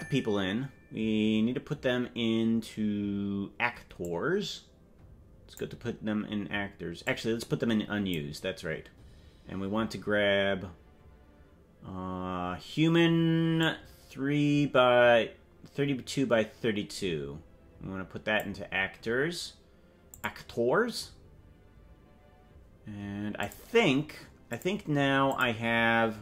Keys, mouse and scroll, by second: 4.0-5.6 drag, 7.0-8.1 drag, 13.6-18.4 drag, 20.1 click, 23.4 click, 24.4 click, 25.2 click.